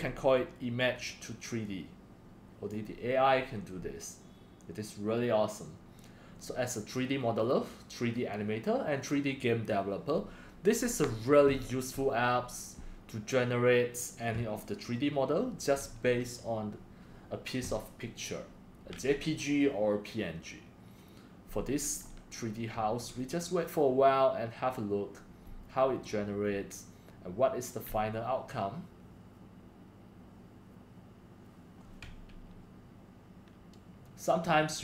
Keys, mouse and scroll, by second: 1.7-2.7 drag.